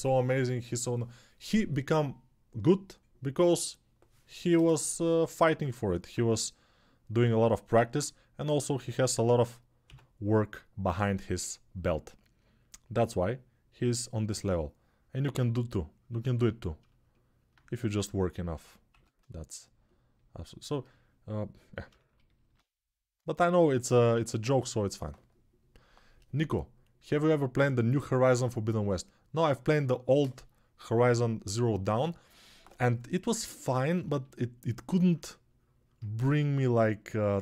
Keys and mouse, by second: 6.0 3, 7.5 alt+q, 9.6 x, 36.4-37.4 alt+drag.